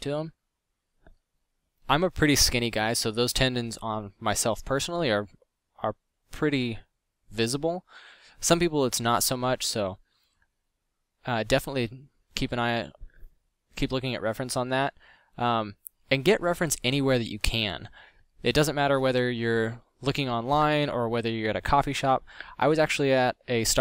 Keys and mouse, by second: 19.0 drag, 21.3-21.8 drag, 22.3 f.